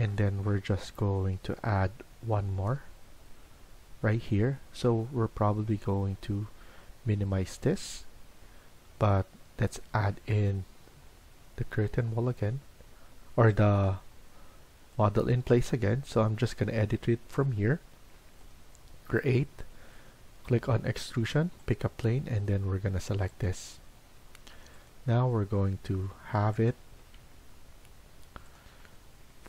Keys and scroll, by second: 11.6 Escape, 27.1 Escape.